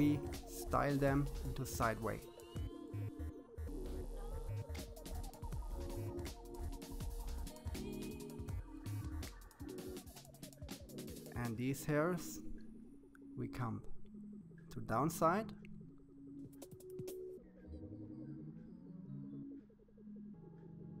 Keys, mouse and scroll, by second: 1.1-2.7 middle drag, 5.6-6.4 scroll up 3, 6.4-7.8 scroll up 1, 9.8-11.3 drag, 15.2-16.5 drag, 16.5-17.0 scroll down 2, 17.0-18.5 middle drag, 19.7-21.0 scroll up 1.